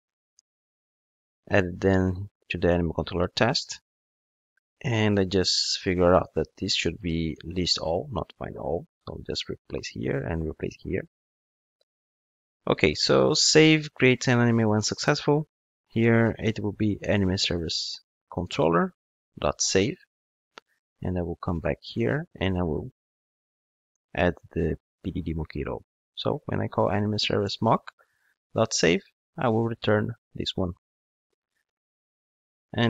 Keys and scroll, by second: 0.7 super+v, 7.0 super+c, 8.8 super+v, 18.6 Return, 24.9 super+/, 27.4 Return.